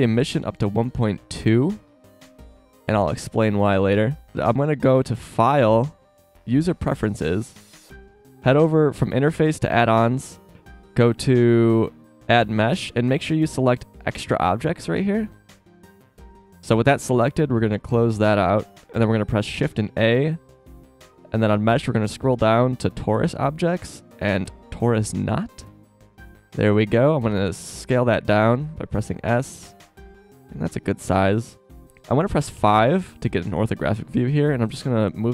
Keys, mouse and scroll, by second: 4.3 z, 5.2-6.0 drag, 19.8 shift+a, 26.0 z, 27.3 s, 32.5 KP_5, 35.1-35.3 drag.